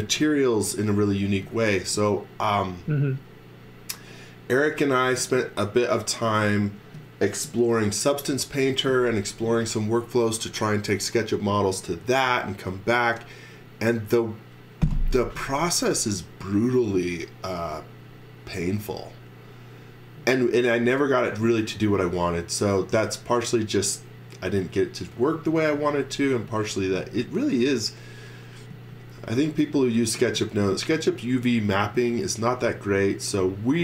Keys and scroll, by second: 25.7 x, 28.7 z.